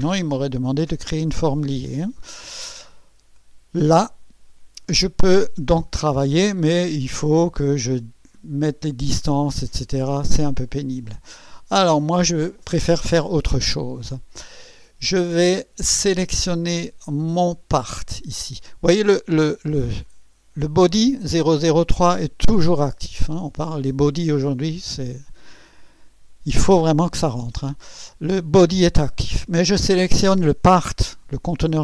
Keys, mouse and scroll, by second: 0.9 right click, 10.7 click, 17.8 click.